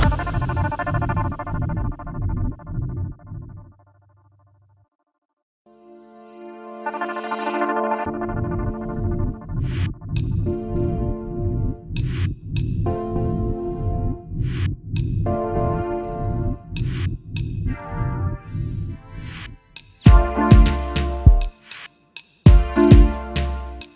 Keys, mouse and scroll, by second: 0.6 ctrl+g, 3.2 shift+click, 5.8 double click, 7.0 ctrl+z, 7.5 double click, 8.7 ctrl+g, 9.5 double click, 10.0 shift+click, 11.4 double click, 12.6 shift+click, 13.5 shift+click, 17.1 alt+scroll up 1, 18.1-18.7 typing, 21.4 alt+scroll down 1, 22.1 double click, 22.7 alt+scroll up 1.